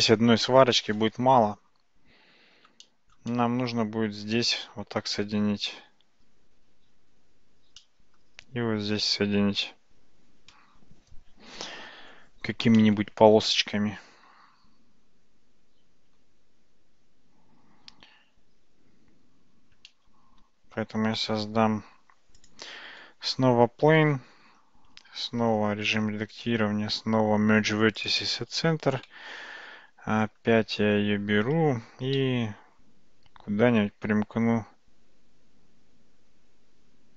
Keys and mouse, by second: 2.9 shift+middle click, 3.3-4.1 middle drag, 7.9 middle click, 16.1 Tab, 19.5 Tab, 21.3 shift+a, 25.5 Tab, 26.4-28.1 right drag, 29.1 Tab, 32.2 g.